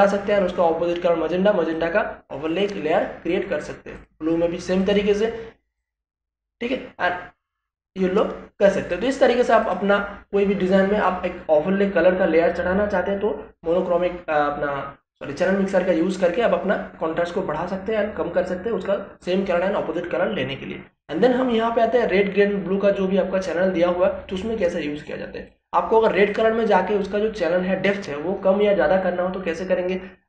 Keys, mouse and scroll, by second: 24.7 click.